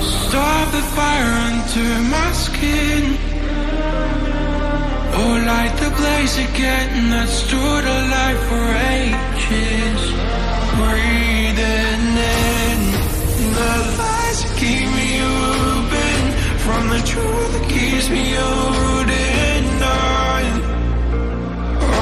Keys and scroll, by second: 4.6 shift+Down.